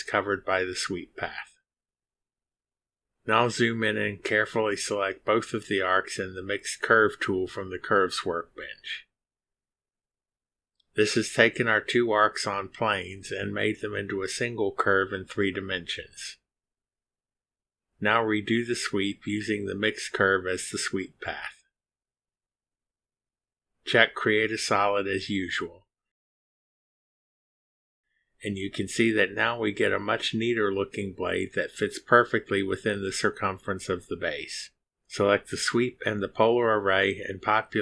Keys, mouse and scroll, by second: 0.2 right click, 1.9 click, 4.4 click, 5.3-5.6 scroll up 2, 7.9 click, 9.8 ctrl+click, 13.2 click, 20.8 click, 22.4 click, 23.4 click, 24.6 click, 25.5 click, 26.2 click, 27.4 click, 36.0 ctrl+click, 37.5 ctrl+click.